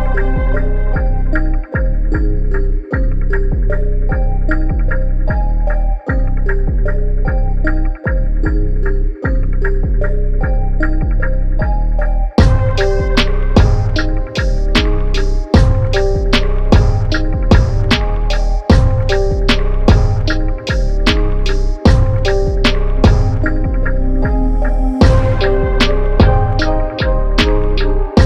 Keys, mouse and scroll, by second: 3.4 KP_Subtract, 3.8 KP_1, 4.1 KP_5, 4.4 KP_0, 7.5 click, 7.8 scroll up 1, 8.3 click, 9.2 scroll up 1, 10.3 click, 18.0 click, 25.1 click.